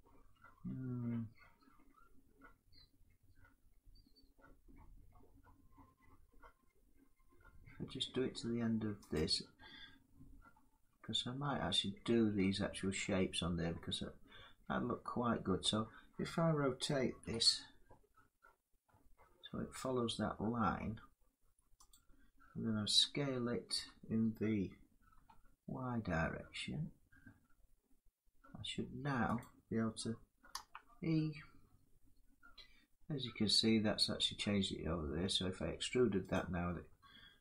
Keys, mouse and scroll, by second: 8.8-14.0 drag, 16.9 r, 21.6-26.6 drag, 23.4 s, 24.8 y, 29.1-34.2 drag, 30.2 e, 36.0-37.4 drag.